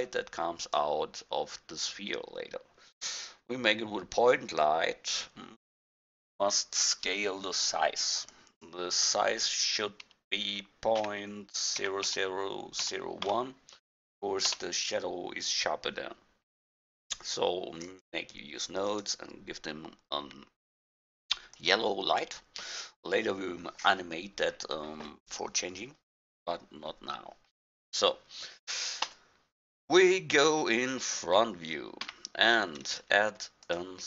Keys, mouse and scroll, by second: 8.3-10.5 drag, 12.1 0, 17.8-22.0 drag, 29.1 KP_1, 32.1 a, 33.8 click.